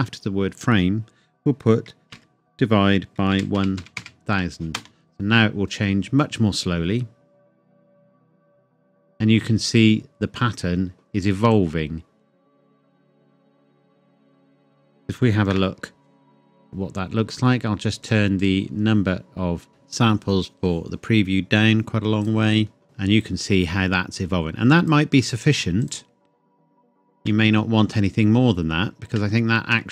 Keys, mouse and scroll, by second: 2.1 /, 3.3-4.0 typing, 4.8 Return, 8.0 click, 15.5 KP_0, 18.0 click, 22.2 click, 27.1 space, 29.1 space.